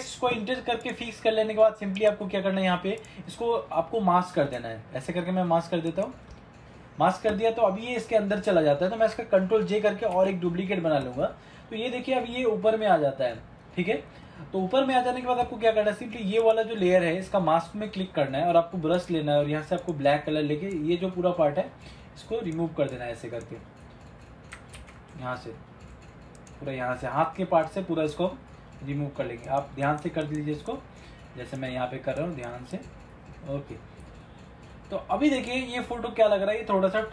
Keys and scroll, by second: 10.3 ctrl+j, 24.9 ctrl+z.